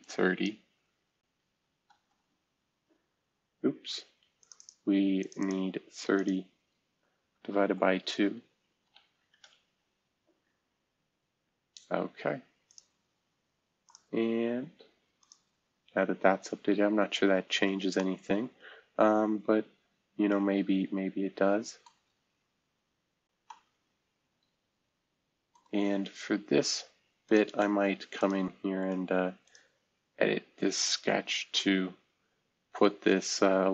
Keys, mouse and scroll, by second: 0.0 click, 1.3 typing, 1.9 Return, 7.4 Left, 7.6 Left, 7.8 Left, 8.8 /, 9.1 2, 9.4 Return, 12.6 click, 13.8 click, 15.1 click, 16.8 scroll down 2, 17.1-18.5 scroll up 2, 21.9 middle click, 22.2-23.2 scroll up 1, 25.8-26.1 scroll down 2, 27.2 click, 30.5-31.3 scroll up 2, 31.3-32.1 scroll down 1.